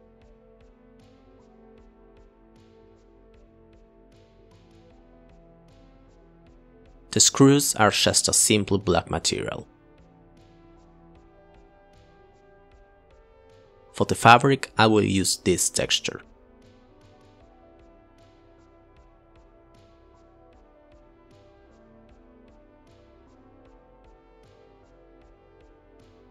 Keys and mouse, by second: 0.2 Delete, 0.8 click, 1.2 click, 1.9 click, 2.8 drag, 4.0 click, 9.5 click, 12.0 click, 18.8 click, 19.9 shift+a, 20.5 click, 20.6 click, 20.8 click, 21.4 click, 21.6 click, 22.5 click, 22.8 click, 23.2 shift+a, 23.8 click, 24.0 click.